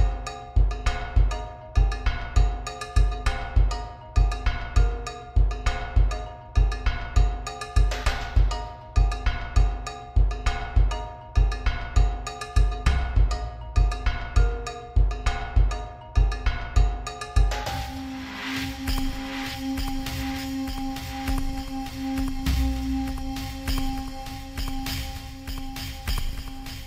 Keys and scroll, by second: 19.9 ctrl+alt+z, 25.1 ctrl+shift+t.